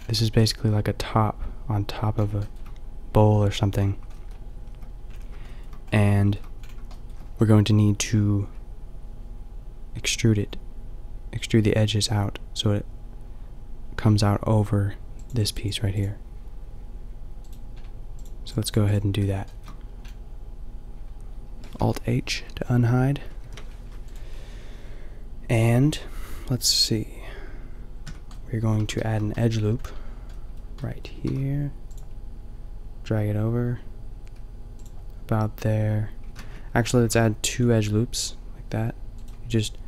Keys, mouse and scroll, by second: 2.1 middle drag, 5.2-5.8 middle drag, 17.7-22.9 middle drag, 23.5 alt+h, 28.0 Tab, 28.7 a, 31.3 ctrl+r, 36.3 ctrl+z, 37.1 ctrl+r.